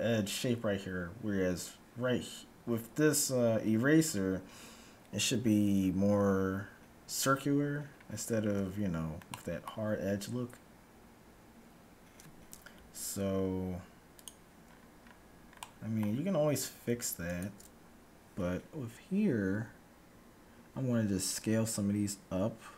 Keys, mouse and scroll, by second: 7.9-8.6 scroll up 1, 8.6 Tab, 8.6-9.2 scroll up 1, 9.2-11.1 middle drag, 12.9-14.6 middle drag, 14.2-15.9 drag, 14.7-17.9 middle drag, 17.2-18.9 right drag, 19.6 s.